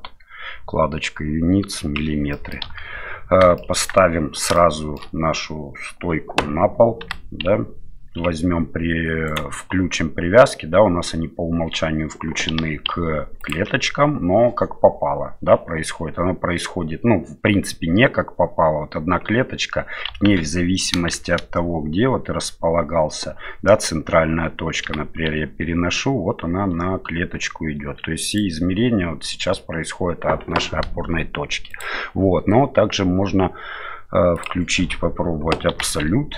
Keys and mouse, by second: 2.3-2.6 middle drag, 2.6 KP_1, 3.6 shift+middle drag, 4.5 shift+middle click, 7.0 g, 12.5 g, 20.3 ctrl+z, 21.1 shift+z, 24.8 g, 31.7-34.7 drag, 35.7 g.